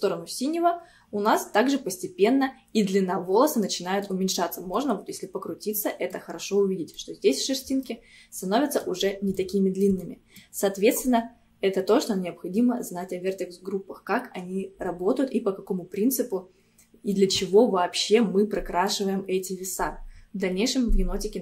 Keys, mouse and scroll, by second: 1.3-4.3 middle drag, 4.5-4.8 scroll up 1, 4.8-8.2 middle drag, 8.2 scroll down 1, 8.4-13.0 middle drag, 16.8-17.2 scroll down 1, 17.2-20.3 middle drag.